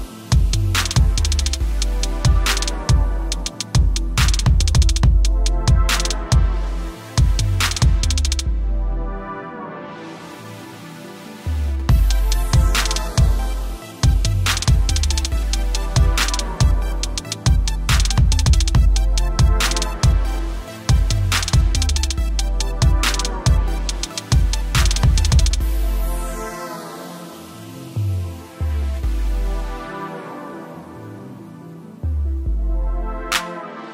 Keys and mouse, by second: 12.6 click, 14.8 click, 26.1 click, 28.2 click, 32.6 =, 33.6 shift+click.